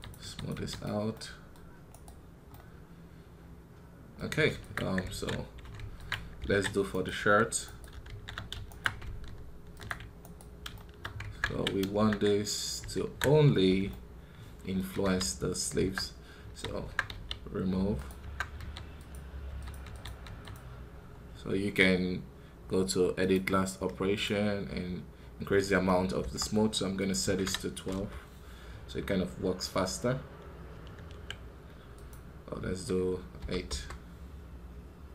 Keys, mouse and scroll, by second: 1.0-5.7 middle drag, 8.6-10.7 shift+right drag, 10.7 shift+middle click, 11.1 Tab, 13.7-14.9 middle drag, 14.9 KP_1.